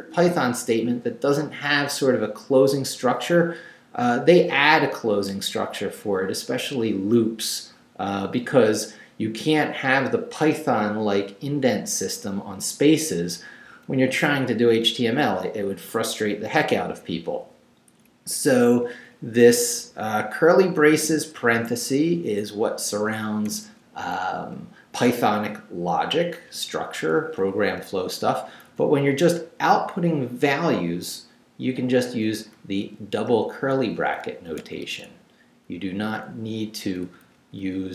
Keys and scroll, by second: 13.7 Down, 18.3 Up, 19.7 Left, 21.4 Right, 23.5 Right, 27.2 Up, 28.5 Right, 30.9 Right, 32.6 Left, 33.8 Right, 34.2 Left, 34.6 Right, 34.8 Left, 36.4 Right, 36.8 Down.